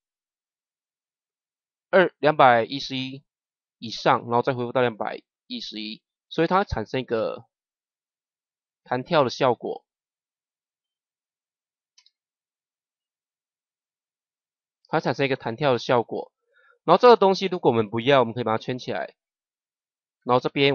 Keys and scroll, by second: 7.0 KP_0, 11.9 KP_0.